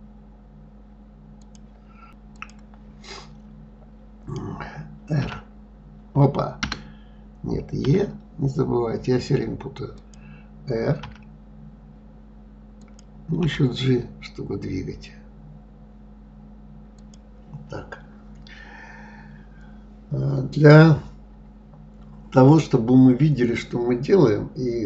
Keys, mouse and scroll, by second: 2.3 click, 5.2 r.